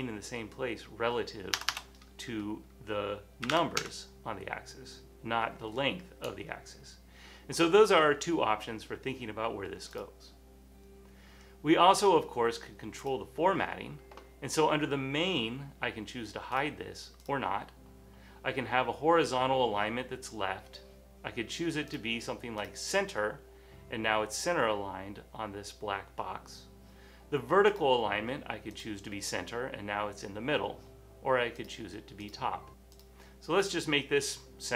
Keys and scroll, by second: 0.0-0.1 typing, 1.7 BackSpace, 1.7 BackSpace, 3.3-4.2 typing.